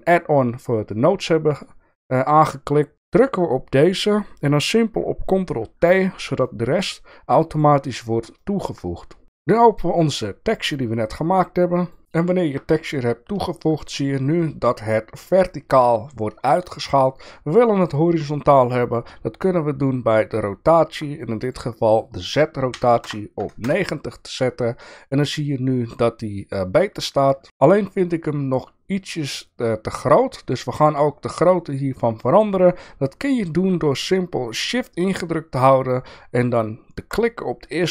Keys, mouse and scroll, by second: 1.3 shift+click, 2.3 click, 2.9 click, 5.6 ctrl+t, 6.4-7.6 drag, 8.4 shift+middle click, 21.5-24.4 drag, 27.4 shift+middle click, 37.2-37.9 shift+drag.